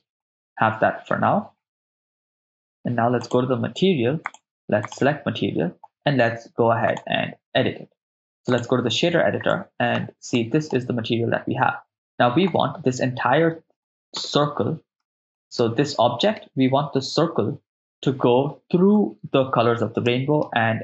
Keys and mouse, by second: 3.2 click, 4.3 click, 6.9-8.6 drag, 9.5 middle click, 10.3 ctrl+middle click, 14.3 KP_0, 15.0 middle click, 15.6-16.4 ctrl+middle drag, 20.1 middle click.